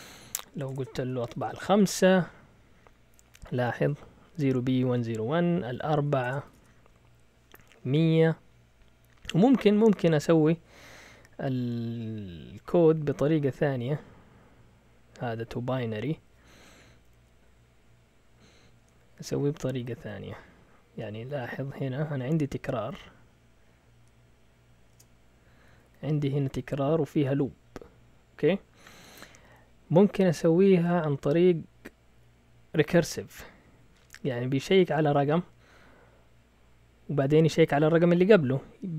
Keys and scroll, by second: 0.6 BackSpace, 0.7 BackSpace, 1.3 5, 1.5 Return, 6.2 BackSpace, 6.4 4, 6.5 Return, 10.3 Up, 11.5 Up, 11.8 Up, 19.4 Down, 19.9 Down, 21.4 Up, 21.5 Up, 21.7 Up, 21.8 Up, 22.0 Up, 24.9 Return, 25.6 Down, 25.8 Down, 26.0 Down, 26.1 Down, 26.3 Down, 26.4 Down, 31.6 Down, 32.0 typing, 32.0 Down, 32.1 Down, 32.2 Down, 33.4 Up, 33.7-35.1 typing.